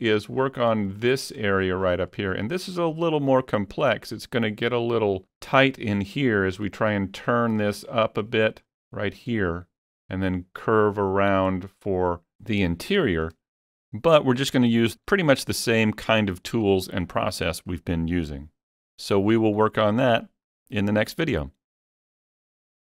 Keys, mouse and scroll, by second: 0.4-0.7 scroll up 3, 0.7 middle click, 1.5 middle click, 1.9 scroll up 1, 2.2 middle click, 8.6 middle click, 8.6-10.0 scroll up 2, 11.5 scroll down 1, 11.7-12.3 scroll down 1, 13.9 middle click, 13.9 scroll down 1, 14.6 scroll up 1, 14.9-17.7 shift+middle drag, 19.1-21.9 shift+middle drag, 19.1 scroll up 1.